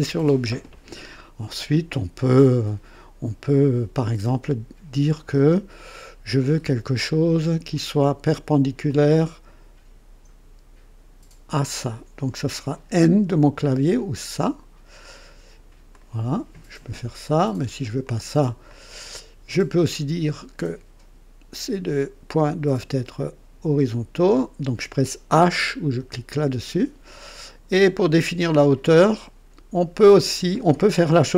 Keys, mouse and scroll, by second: 8.8 click, 11.4 click, 13.9 click, 15.9-17.1 drag, 18.0 click, 18.6 click, 21.4 click, 24.2 click, 26.2 h, 30.0-30.8 drag, 31.2-31.3 scroll up 2.